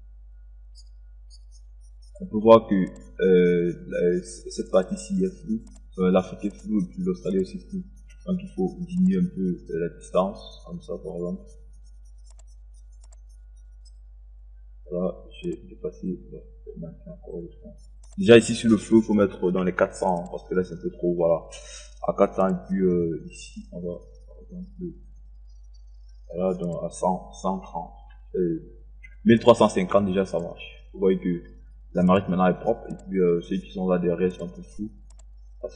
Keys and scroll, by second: 19.4 KP_4, 19.7 0, 27.6 KP_1, 28.0 KP_3, 28.4 KP_5, 29.2 KP_0.